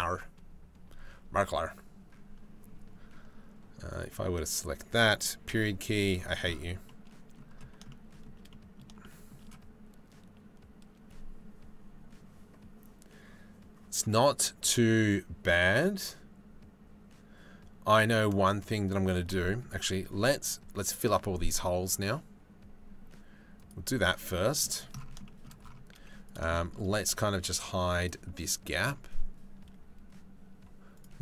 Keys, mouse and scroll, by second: 3.5 click, 5.1 KP_Decimal, 6.5 click, 21.2 click, 24.0 middle click, 24.8 shift+click, 25.6 z, 26.1 shift+middle click, 27.6 click, 30.5 click.